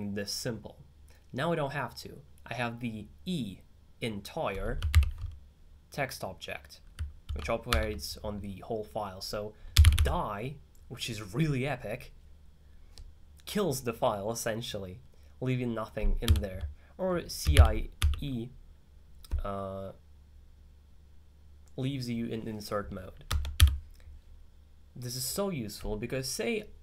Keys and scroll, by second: 5.1 alt+6, 7.5 alt+2, 9.5-10.5 typing, 16.3-18.5 typing.